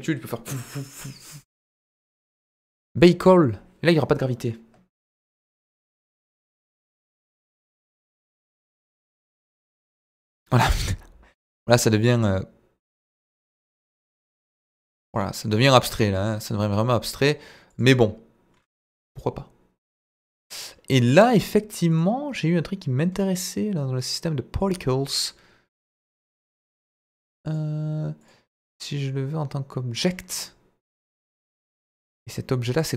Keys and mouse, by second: 2.7-8.3 drag, 9.2-15.6 drag, 15.8 middle drag, 17.7 click, 19.1 click, 20.1 click, 22.3 click, 24.5 click, 25.8 click, 26.2 click, 26.6 click, 27.4 click, 28.1-30.0 drag, 31.0 middle click, 31.3 shift+a.